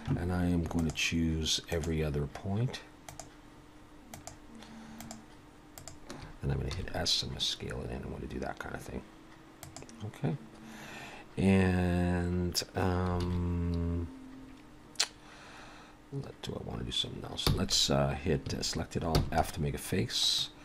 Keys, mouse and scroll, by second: 0.8 shift+click, 2.7 shift+click, 5.8 shift+click, 6.7 s, 10.5 scroll down 1, 13.2 alt+a, 17.5 f, 18.5 a, 19.1 f, 20.4 middle click.